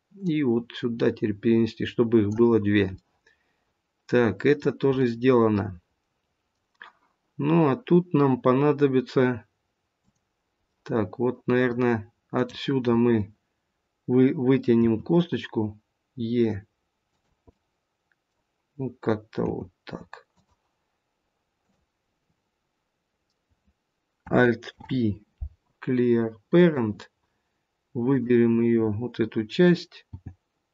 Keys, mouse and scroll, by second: 0.1 click, 2.9 middle click, 4.8 middle click, 9.9 click, 10.8 middle click, 12.3 click, 14.8 e, 17.4 middle click, 19.5 g, 21.6 click, 24.7 alt+p, 28.0 click, 29.9 g.